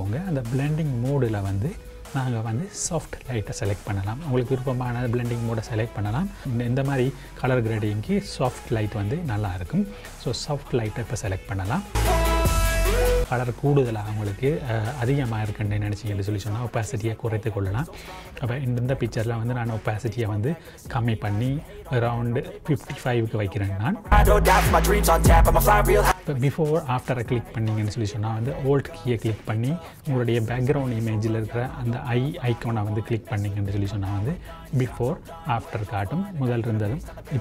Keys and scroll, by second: 11.9 z, 24.1 KP_5.